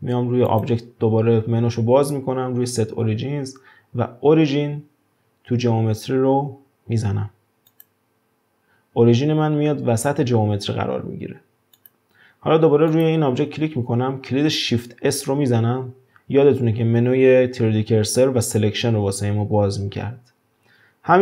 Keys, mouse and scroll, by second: 0.4-3.5 drag, 11.8 click, 12.9 click, 15.1 shift+s.